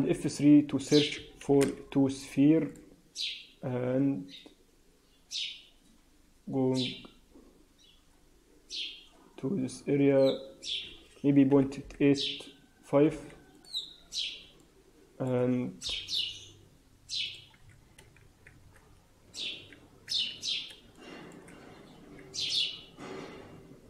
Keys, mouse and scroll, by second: 13.9 scroll down 3, 14.5 alt+middle click, 15.7 KP_3, 17.2 click, 17.8 scroll up 2, 18.1 shift+z, 18.8-19.3 scroll up 2, 19.3 shift+z, 19.7 shift+z, 21.1 shift+middle click, 21.5-21.9 scroll up 1, 22.1 g.